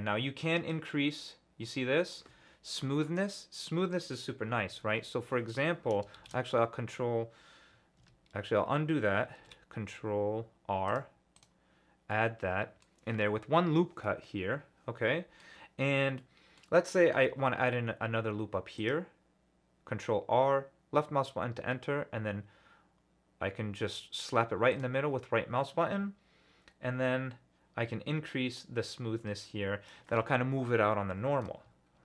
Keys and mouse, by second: 0.7-2.1 drag, 4.7 ctrl+z, 6.2 ctrl+shift+z, 8.0 ctrl+z, 9.4 ctrl+r, 12.1-12.8 middle drag, 14.0-15.4 middle drag, 16.2-17.0 middle drag, 17.1 ctrl+r, 24.7 middle click, 28.7-29.9 drag.